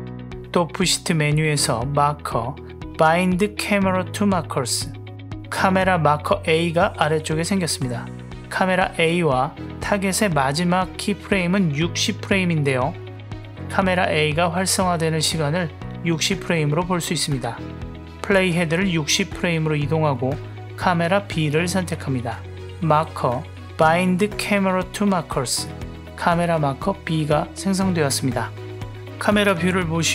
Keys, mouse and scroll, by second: 2.0-5.6 drag, 8.6 drag, 9.3 click, 9.8 click, 10.7 click, 12.0 l, 13.5 click, 14.4 drag, 15.0 l, 18.7 Up, 22.0 click, 23.5-25.2 drag, 27.8-30.1 drag.